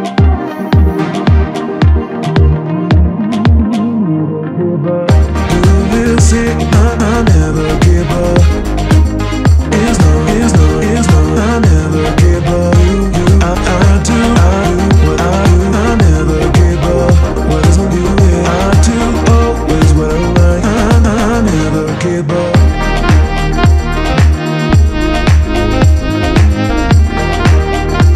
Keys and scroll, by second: 1.4 Return, 7.0 Escape, 8.2 Delete, 11.4 Escape, 14.7 Return, 24.5 Return, 25.2 Escape.